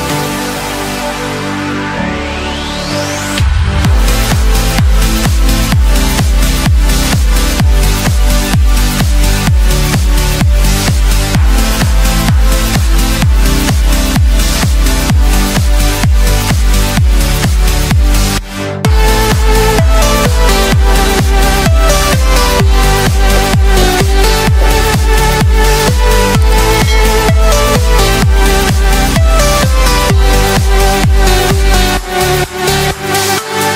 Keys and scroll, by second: 6.2 ctrl+space.